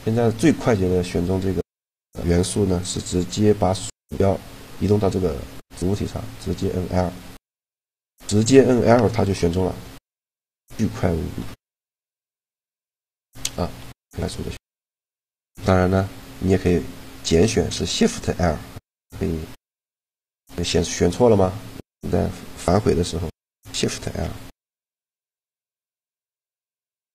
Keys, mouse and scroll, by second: 6.1 l, 8.1 a, 9.1 l, 10.2 a, 11.1 l, 12.8 l, 13.5 l, 15.7 shift+l, 22.9 l, 24.0 shift+l, 25.8 g, 26.8 right click, 27.0 a.